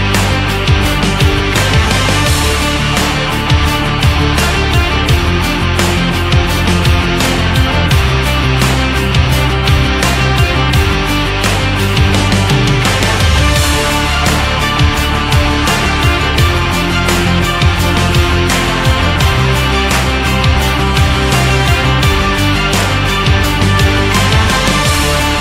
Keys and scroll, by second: 3.0 shift+x, 9.7 Left, 11.4 ctrl+z, 16.6 shift+Up, 17.5 shift+Down, 18.6 Right, 19.5 shift+Right, 20.5 shift+Left, 21.2 Right, 23.9 Right.